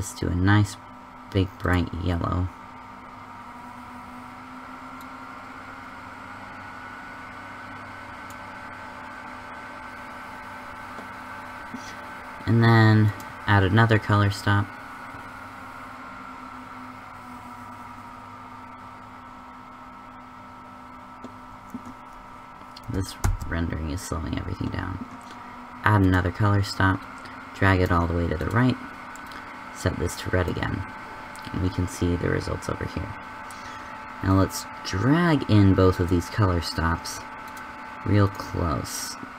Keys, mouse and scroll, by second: 30.4 click.